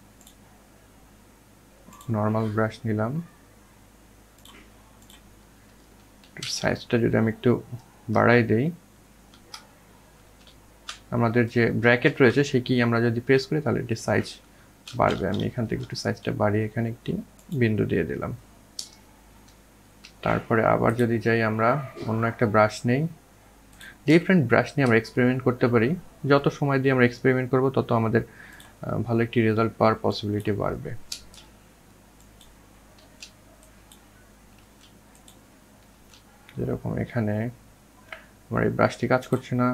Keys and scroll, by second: 4.4 ctrl+z, 7.2 ctrl+], 8.1 ctrl+], 8.6-9.4 ctrl+], 9.8 ctrl+], 10.3 ctrl+], 12.7-14.1 typing, 29.3 ctrl+z, 31.1 ctrl+z, 32.7 ctrl+z, 34.1 ctrl+z, 39.2 ctrl+z.